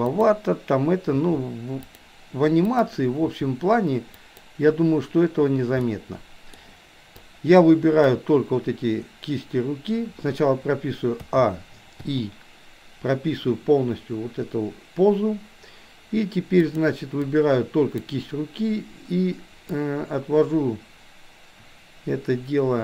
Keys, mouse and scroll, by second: 0.1 click, 1.2 r, 2.8 click, 3.3 r, 5.8 middle click, 7.2-8.2 drag, 11.3 a, 12.1 i, 16.6 click, 17.3-18.1 drag, 19.8-22.8 drag.